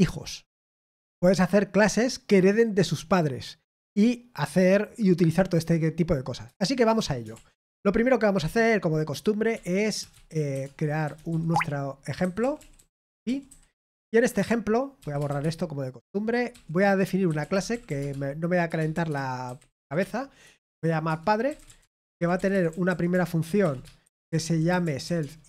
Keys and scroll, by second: 6.5 super+l, 7.3 super+l, 11.1-13.9 typing, 17.9-25.4 typing, 21.0 Return.